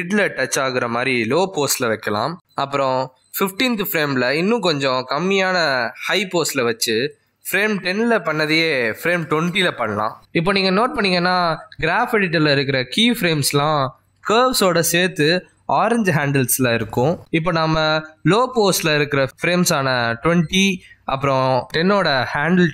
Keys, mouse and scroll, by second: 1.2 alt+g, 3.6-4.4 alt+scroll down 5, 4.9 g, 6.3-7.3 alt+scroll down 5, 7.4 g, 7.6 g, 14.9 middle click, 16.1-18.0 scroll up 8, 17.1 middle click.